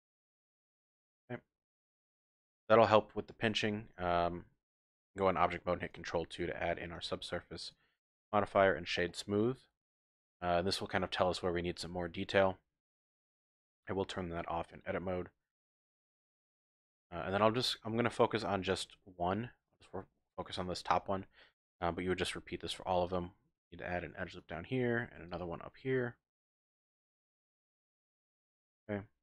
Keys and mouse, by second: 0.2-1.5 drag, 1.8 Tab, 2.3 Tab, 2.5 click, 3.5 Tab, 5.8 ctrl+2, 7.0 click, 9.1 click, 9.6 typing, 11.8 Tab, 14.7-15.7 drag, 17.0 shift+click, 18.1 shift+click, 19.7 shift+click, 22.5 ctrl+r, 24.3 click, 24.9 ctrl+r, 27.5 click, 27.9 ctrl+r.